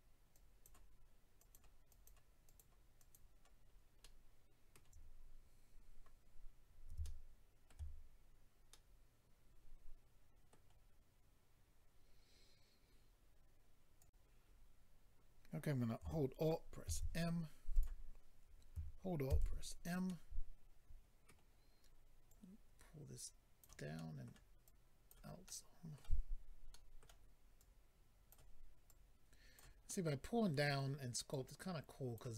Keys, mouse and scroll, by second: 0.3 click, 1.4 click, 1.5 click, 1.9 click, 2.0 double click, 2.4 double click, 2.6 double click, 3.0 double click, 3.1 double click, 3.7-4.0 scroll down 2, 4.0 middle click, 7.0 shift+middle click, 8.0-8.7 scroll up 1, 8.7 middle click, 10.8-11.7 scroll down 2, 14.0 click, 14.0 click, 16.8 alt+m, 17.7 click, 19.3 alt+m, 20.1 middle click, 22.3 click, 23.9 middle click, 24.6 click, 25.4 middle click, 26.7 middle click, 28.3 click, 28.9 click, 29.6 click, 29.9 middle click, 31.3 click.